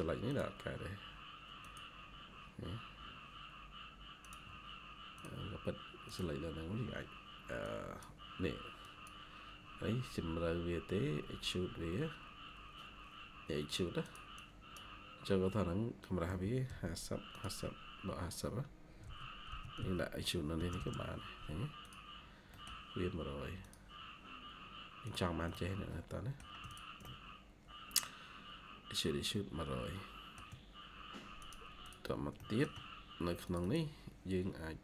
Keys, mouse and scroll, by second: 2.4-4.3 scroll up 1, 14.3 double click, 16.2-16.6 typing, 19.1-19.9 typing, 20.5 Return, 20.7 Return, 22.1 scroll down 1, 22.4 middle click, 24.1-25.2 scroll down 1, 26.6 shift+click, 26.9 shift+middle click, 31.7 double click, 32.3 shift+middle click, 33.5 double click, 34.3 scroll down 1.